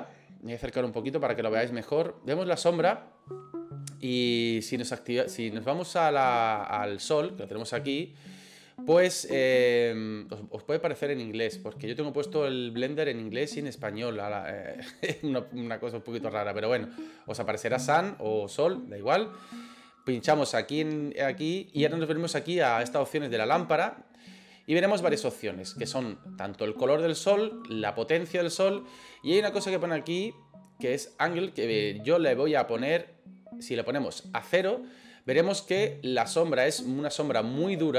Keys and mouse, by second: 1.1-2.5 middle drag, 20.1 click, 33.0-34.8 drag.